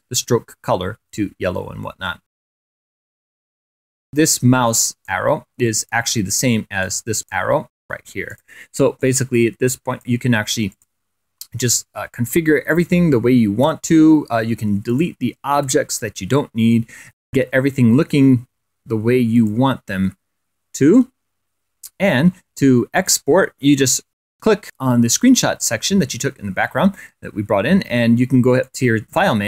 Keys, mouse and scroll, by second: 0.3-1.5 drag, 5.5 click, 6.8-8.0 drag, 8.6 click, 9.6 click, 10.3-11.6 drag, 12.0 click, 12.4-12.8 scroll up 2, 13.3 ctrl+scroll down 2, 14.0-14.4 ctrl+scroll up 3, 15.0 Delete, 16.2 click, 17.0 Delete, 18.5 click, 19.6 Delete, 20.7 click, 21.4 Delete, 22.3 click, 24.3 click.